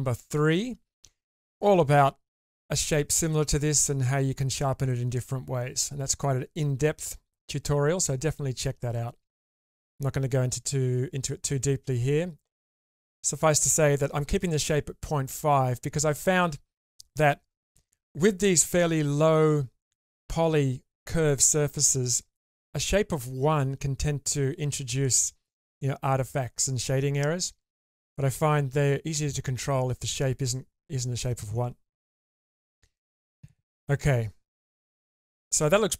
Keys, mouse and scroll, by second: 35.2 shift+middle click, 35.7-35.9 middle drag.